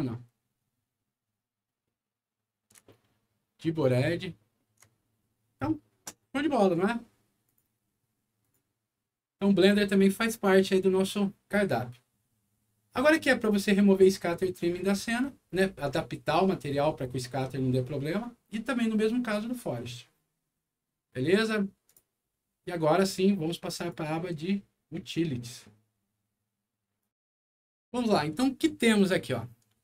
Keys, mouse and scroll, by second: 0.9 middle click, 2.8-4.5 ctrl+middle drag, 7.4 ctrl+click, 8.4 click, 21.8 click, 23.7 click, 27.0 click, 27.2 alt+w.